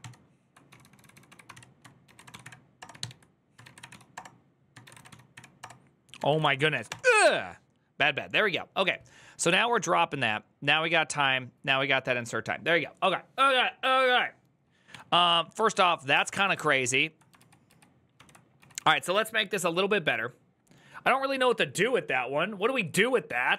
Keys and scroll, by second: 0.0-6.6 typing, 3.9 Return, 5.4 Return, 6.6 Return, 15.4 ctrl+a, 15.4 q, 16.0 ctrl+c, 16.2 ctrl+u, 16.4 ctrl+u, 17.1 ctrl+u, 17.9 ctrl+u, 17.9 ctrl+d, 18.3 typing.